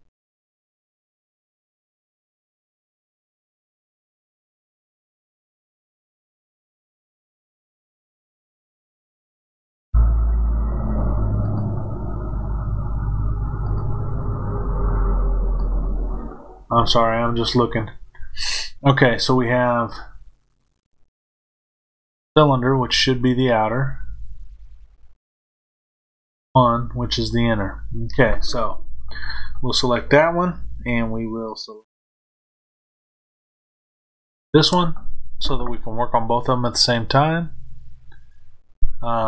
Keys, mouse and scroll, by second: 3.1 click, 7.1 click, 8.9 click, 11.4 click, 13.6 click, 15.4 click, 16.6 click, 22.1 click, 25.2 click, 33.7 shift+click.